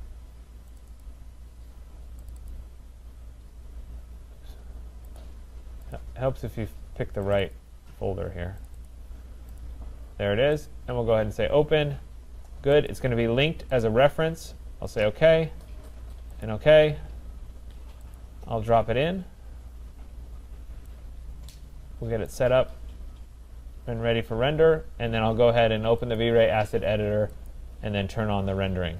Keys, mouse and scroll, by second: 0.8 click, 1.0 click, 2.3 click, 2.5 click, 5.2 click, 5.9 click, 7.3 click, 7.6 click, 8.7 click, 8.9 click, 9.6 click, 10.7 click, 12.9 click, 13.8 click, 15.1 click, 16.5 click, 18.7 click, 18.7-20.0 scroll, 20.3 middle click, 22.3 right click, 22.7-23.1 scroll, 23.2 scroll, 24.8-25.3 scroll, 26.2 click, 27.5 click.